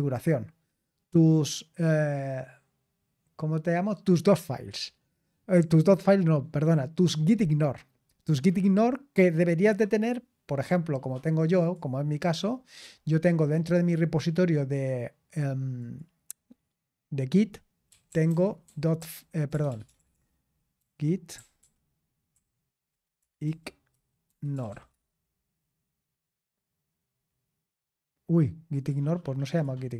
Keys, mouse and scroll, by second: 11.6-13.8 drag, 15.8 click, 17.6-25.2 typing, 28.7-29.9 drag.